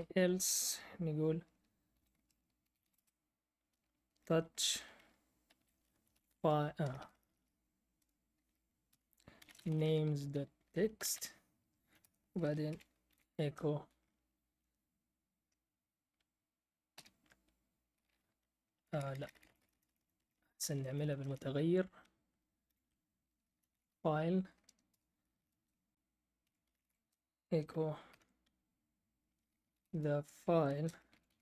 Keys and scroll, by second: 1.7-3.3 typing, 5.2-7.4 typing, 8.6-13.7 typing, 16.6-17.4 typing, 18.7-21.1 typing, 22.6-24.9 typing, 26.1-28.1 typing, 29.3-31.4 typing.